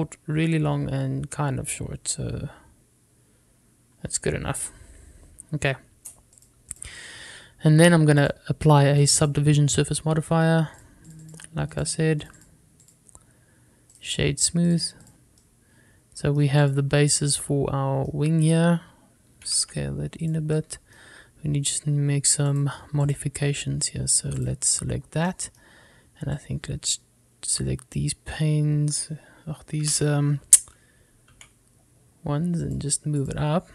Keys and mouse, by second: 7.6 click, 9.3-10.4 drag, 12.0 click, 13.3 click, 14.0 click, 15.0-15.9 right drag, 16.5-17.5 middle drag, 17.7 click, 18.4-19.2 middle drag, 20.4 s, 20.7 x, 21.4 click, 21.7 middle click, 23.6 click, 25.5 click, 26.4 middle click, 27.6-29.1 drag, 30.9 g, 32.5 z.